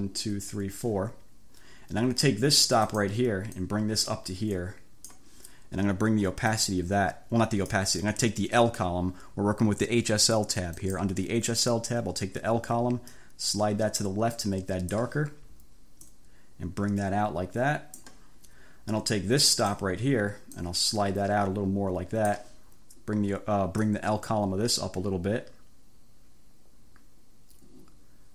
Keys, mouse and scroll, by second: 2.9 click, 3.6-5.4 drag, 6.6-8.0 drag, 10.8 click, 13.2-15.2 drag, 16.2-18.3 drag, 19.6 click, 20.6-22.6 drag, 23.9-28.3 drag.